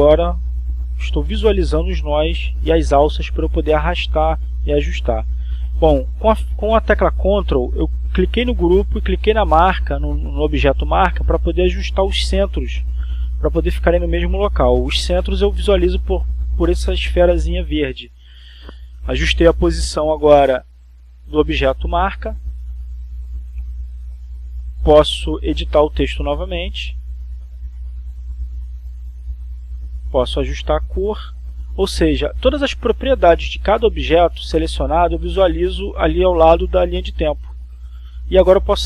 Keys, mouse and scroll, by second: 0.1 Return, 3.1 click, 4.0-5.0 drag, 5.9 click, 8.2 ctrl+click, 10.1-14.2 drag, 15.7 click, 16.7-18.3 drag, 20.7 click, 25.0 click, 26.6 click, 28.1 click, 29.0 Caps_Lock, 29.2-30.6 typing, 31.0 click, 33.4 click, 34.1 click, 35.6 click, 37.0 click.